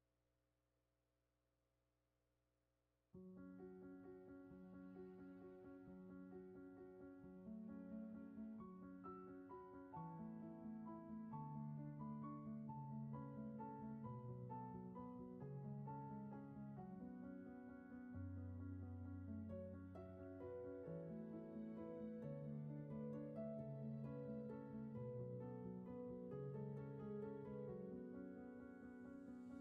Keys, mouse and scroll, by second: 4.5 ctrl+z.